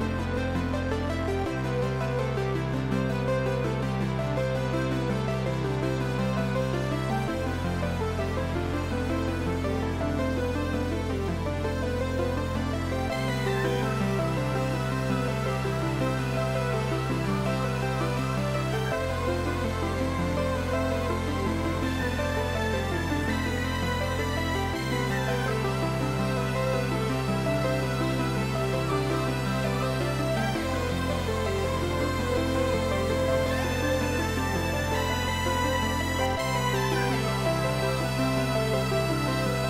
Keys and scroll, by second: 20.7 ctrl+t, 30.6 ctrl+t.